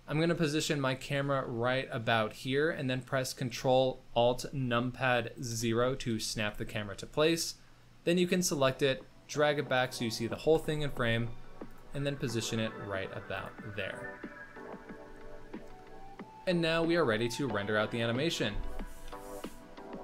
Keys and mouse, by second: 0.1 shift+drag, 1.0 shift+middle click, 1.5-2.0 ctrl+middle drag, 2.2 middle click, 2.6 shift+middle click, 3.0 middle click, 5.5 ctrl+alt+KP_0, 6.5 z, 7.3 click, 8.3 g, 10.3 r, 11.8 g, 15.0 z, 19.2 ctrl+s.